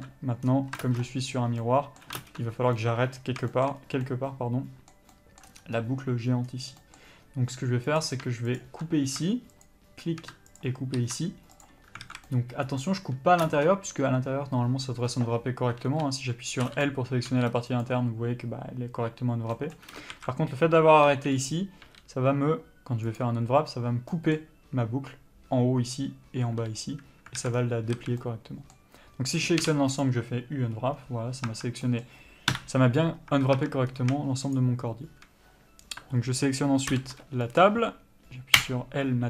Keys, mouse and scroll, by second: 0.2 ctrl+space, 0.8-1.1 scroll down 1, 1.1 ctrl+space, 1.9 middle click, 2.5 ctrl+space, 3.1-8.2 middle drag, 4.1-4.4 scroll up 1, 5.8 scroll down 1, 5.9 scroll up 1, 6.8-7.1 scroll down 1, 7.4-8.2 scroll up 2, 8.2-8.9 drag, 9.9 shift+click, 10.9 ctrl+click, 11.9 ctrl+e, 12.3 alt+a, 12.6-13.1 middle drag, 13.8 ctrl+space, 16.1 3, 16.9 l, 18.1 u, 19.8 middle click, 20.4 alt+a, 21.4 l, 21.6-22.7 scroll down 1, 23.5 u, 27.1-27.7 scroll up 1, 27.7 alt+a, 27.9 scroll down 1, 28.3 a, 28.5 middle click, 30.4 u, 31.8 Tab, 32.2 middle click, 32.8 KP_Divide, 33.6 Tab, 34.2-34.9 scroll up 1, 34.9 shift+click, 38.9 Return.